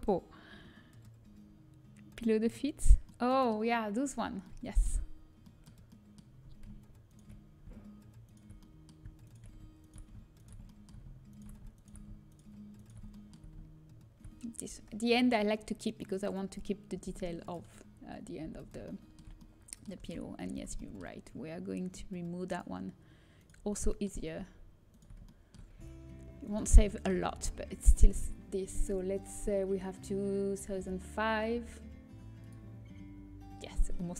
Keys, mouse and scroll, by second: 1.1-4.7 middle drag, 5.4-6.7 middle drag, 7.0-11.1 middle drag, 11.1-15.5 drag, 16.8 Delete, 19.6 a, 19.6 middle click, 19.9 Tab, 20.7 Tab, 20.9-22.2 middle drag, 23.6 middle click, 23.8 middle click, 25.2 middle click, 25.3-29.8 drag, 31.4 Delete.